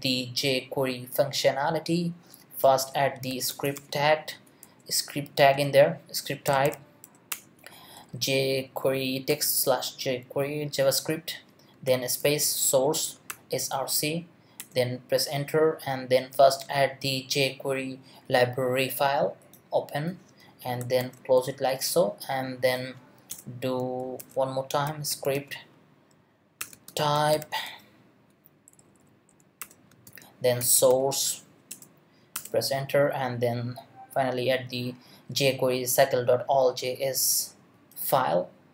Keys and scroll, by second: 2.6-4.2 typing, 4.6 Return, 5.4 space, 6.6 y, 7.3 Return, 7.9 Down, 9.3 Return, 21.9 shift+., 23.3 Return, 24.0 shift+Return, 24.2-27.8 typing, 26.6 Return, 28.7 Down, 29.6 Return, 29.9 space, 30.6 s, 30.9 r, 31.7 Return.